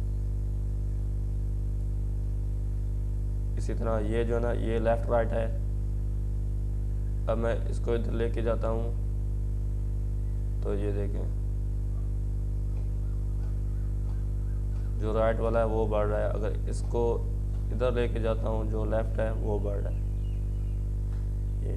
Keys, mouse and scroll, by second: 12.6-17.6 drag, 17.6 ctrl+z, 19.2 click.